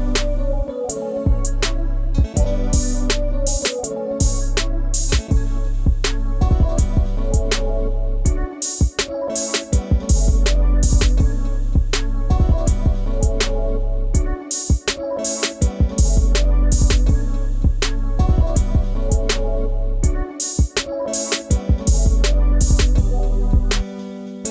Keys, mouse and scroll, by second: 0.3 ctrl+scroll down 1, 0.9 scroll down 1, 3.6 ctrl+d, 10.3 scroll, 10.4-11.1 scroll up 1, 13.6 ctrl+shift+], 15.2 scroll down 1, 15.4-16.6 scroll up 1, 17.2 Up, 22.2-23.3 scroll down 1.